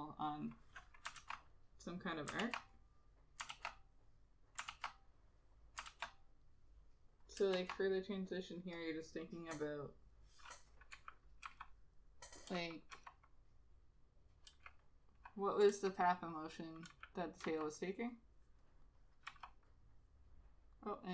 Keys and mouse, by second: 1.3 ctrl+z, 2.5 ctrl+z, 3.6 ctrl+z, 7.5 ctrl+z, 11.2 [, 11.6 ], 12.7 [, 13.0 ], 15.2 [, 15.8 [, 17.0 [, 17.5 ], 19.4 ].